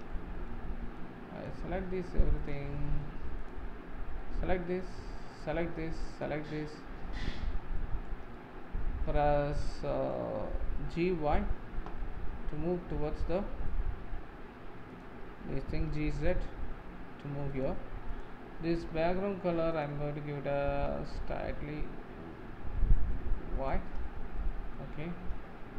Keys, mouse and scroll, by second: 0.1-1.5 middle drag, 1.5 click, 2.5 click, 2.8-3.5 middle drag, 3.5 click, 3.7-4.1 scroll up 3, 4.2-5.4 middle drag, 5.4 shift+click, 6.2 shift+click, 6.6-7.1 scroll down 5, 7.3-10.8 shift+middle drag, 10.8 g, 11.6 g, 15.8 g, 18.2 click, 20.9 click, 24.4-25.0 shift+middle drag, 24.9 scroll up 7.